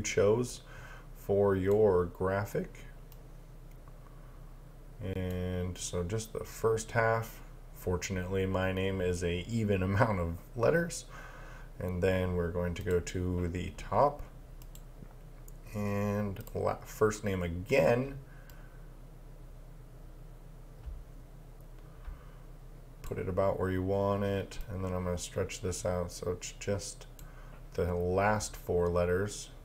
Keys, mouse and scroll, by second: 12.8 click, 24.6 click.